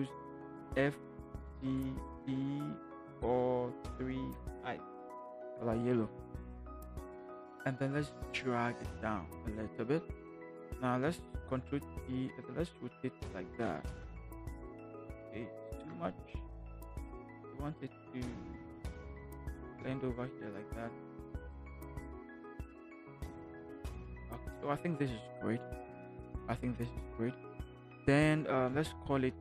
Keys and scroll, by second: 0.7 f, 3.0 4, 8.0 v, 8.5 Down, 8.9 Down, 9.2 Down, 11.3 ctrl+t, 13.9 Return, 15.6 ctrl+t, 19.7 Return.